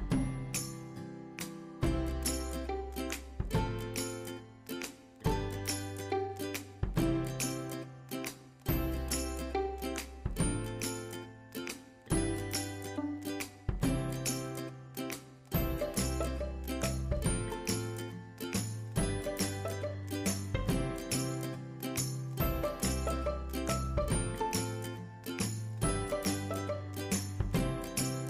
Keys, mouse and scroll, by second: 0.0-0.5 scroll down 1, 1.8 click, 8.2 click, 8.5 click, 11.4 space, 12.3-20.5 drag, 13.1 typing, 19.9 typing, 20.5 right click, 23.2 click.